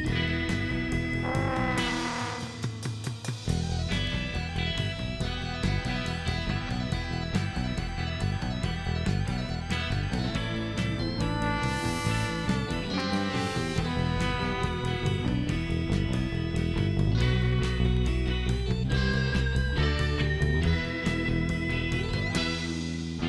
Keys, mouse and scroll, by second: 1.6 shift+right click, 16.1 click, 16.8-17.2 scroll down 2, 18.1 click, 21.2 click.